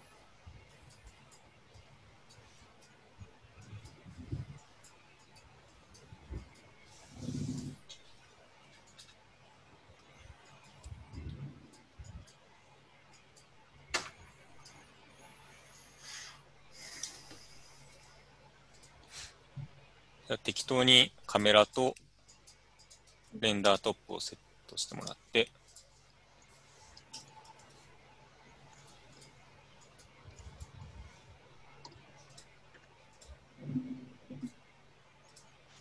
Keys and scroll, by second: 19.7 typing, 24.3 Tab, 24.9 typing, 28.1-29.2 typing.